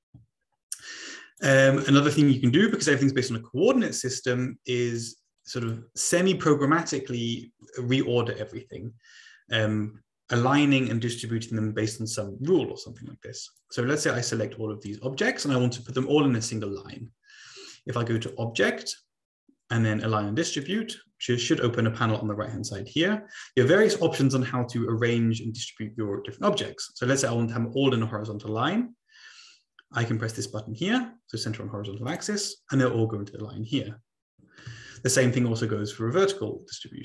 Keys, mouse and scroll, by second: 1.3 click, 2.7-3.8 drag, 4.4-5.0 drag, 5.4 click, 6.1 click, 6.9-7.6 drag, 13.5-14.9 drag, 18.2 click, 20.6 click, 20.9 click, 32.1 click, 34.8 ctrl+z.